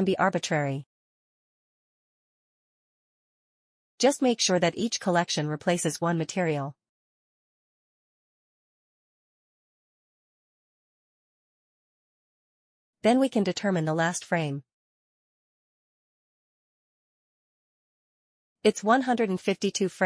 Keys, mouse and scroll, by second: 0.7 click, 5.0 click, 6.5 click, 8.7 click, 10.2 click, 11.4 click, 12.6 click, 14.2 click, 16.0 click, 16.7 click, 16.9 click, 17.2 scroll down 1, 18.0-18.8 scroll up 1, 18.8 click, 18.9 click.